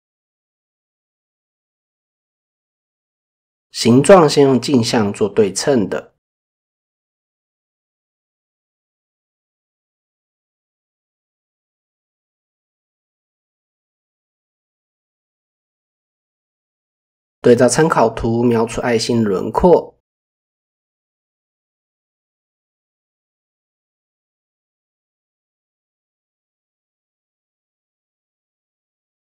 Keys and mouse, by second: 1.4-2.6 drag, 6.6 click, 6.6 e, 7.5-8.2 drag, 9.3 click, 16.4 click, 16.8 click, 17.5 click, 22.9 g, 23.8 click, 24.4 click, 28.4 click.